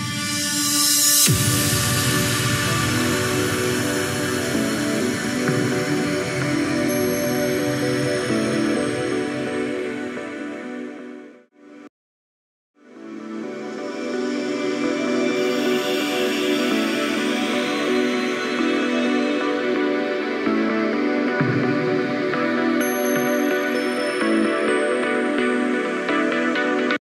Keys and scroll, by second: 3.6 ctrl+g.